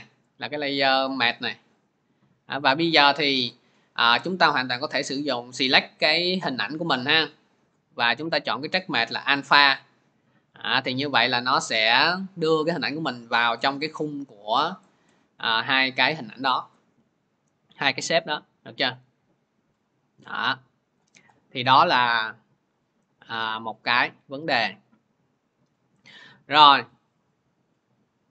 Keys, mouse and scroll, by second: 0.2 click, 0.9 click, 3.4 click, 6.0 click, 6.5 click, 8.3 click, 9.3-13.2 drag, 13.5-14.5 drag, 20.8 click, 24.5 click, 27.0 ctrl+z, 27.9 ctrl+z.